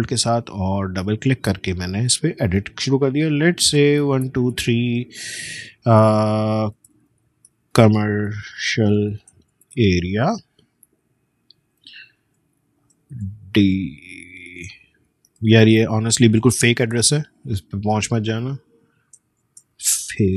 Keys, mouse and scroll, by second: 0.8 ctrl+a, 3.8-5.0 typing, 6.2-10.5 typing, 11.8 BackSpace, 12.2 Return, 13.1-16.0 typing, 19.2-20.3 typing.